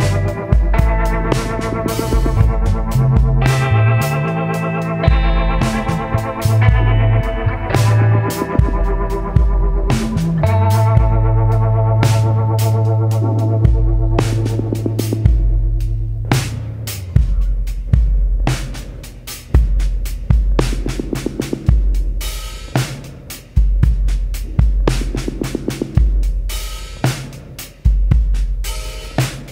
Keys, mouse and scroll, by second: 0.0-0.7 typing, 2.6 click, 6.1 click, 8.1-8.4 scroll down 1, 9.0-9.4 scroll down 2, 9.6-9.9 scroll down 1, 12.3 click, 14.5 click, 16.0 click, 18.6-22.6 ctrl+drag, 23.2-24.6 drag, 25.5-27.2 drag, 28.3-29.5 ctrl+drag.